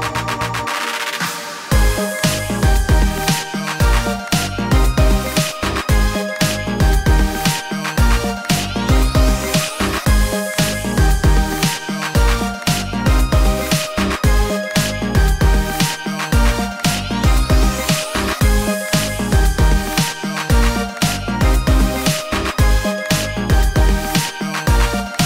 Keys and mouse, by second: 0.0-1.2 typing, 2.7-5.2 drag, 4.1 alt+z, 4.4 1, 4.9 g, 5.5 alt+z, 5.9 shift+click, 6.1-11.1 right drag, 7.5-10.5 typing, 11.1 alt+z, 11.9 g, 12.3-23.4 alt+right drag, 12.5 alt+z, 13.1 alt+r, 13.4 g, 14.2 Tab, 14.9 Tab, 15.1 2, 15.5 g, 16.1 Tab, 17.6 Tab, 19.2 Tab, 19.7 2, 23.4 click, 23.7-25.2 right drag.